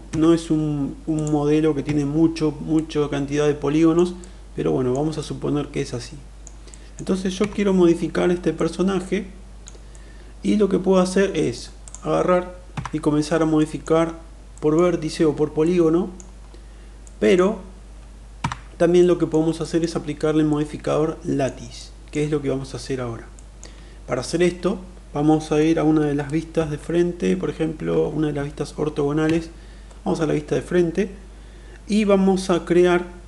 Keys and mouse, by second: 0.0 Tab, 1.1 click, 1.8 Tab, 2.8-4.0 middle drag, 4.1 middle click, 5.1-6.5 middle drag, 6.7 middle click, 7.4 Tab, 8.6-9.7 middle drag, 9.9-11.6 middle drag, 12.6 Tab, 13.6 middle click, 14.5 middle click, 15.7 middle click, 17.0 middle click, 18.2 Tab, 19.0 middle click, 19.6 shift+middle click, 20.5-21.4 middle drag, 21.7 middle click, 23.3 middle click, 26.5 KP_1, 27.9 KP_2, 28.2 KP_3, 29.2 KP_1.